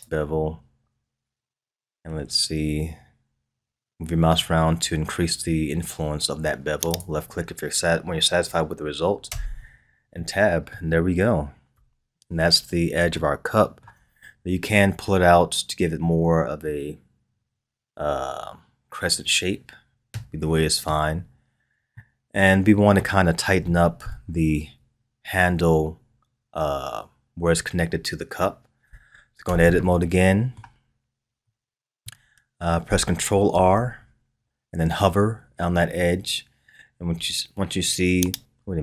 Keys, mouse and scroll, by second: 0.0 space, 7.4-9.3 scroll down 3, 9.3 Tab, 9.7-10.1 scroll down 3, 10.1-11.7 middle drag, 11.7 KP_1, 13.1-16.2 shift+middle drag, 21.9-24.8 middle drag, 24.8-26.2 scroll up 3, 29.4 Tab, 30.0 middle click, 30.9-31.4 scroll up 2, 31.4-33.5 middle drag, 33.5 ctrl+r.